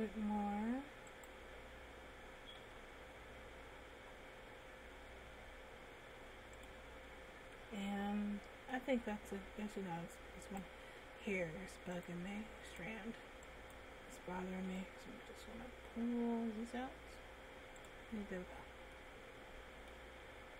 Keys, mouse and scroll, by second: 0.2 Tab, 1.5 right click, 2.9 g, 7.6 Tab, 8.1 middle click, 9.6 Tab, 10.8 right click, 12.1 click, 13.0 click, 15.0 g, 18.1 click, 18.7 Tab, 19.2 middle click, 20.3-20.5 scroll up 2.